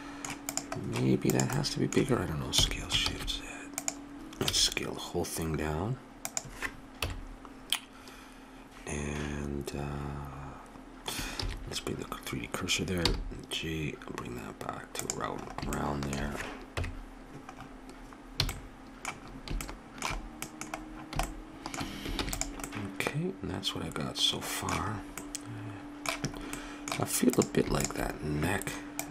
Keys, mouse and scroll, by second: 0.5-2.4 drag, 2.5 s, 4.4 a, 4.4 s, 7.0 KP_7, 11.4 shift+c, 13.0 g, 15.5 middle click, 16.7 KP_Decimal, 18.4 a, 22.2 ctrl+s, 27.4-29.1 drag.